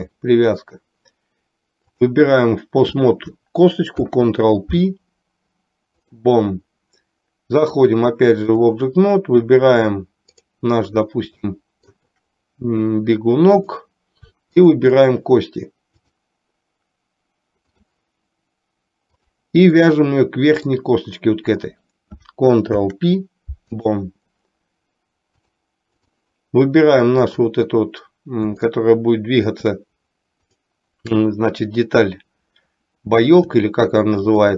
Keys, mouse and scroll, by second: 0.1-1.1 drag, 4.1 ctrl+p, 7.7-8.8 drag, 11.7 shift+middle click, 14.6 shift+click, 16.1-18.2 drag, 19.3 click, 20.0-21.0 middle drag, 25.6-26.3 drag, 28.7-29.7 shift+middle drag.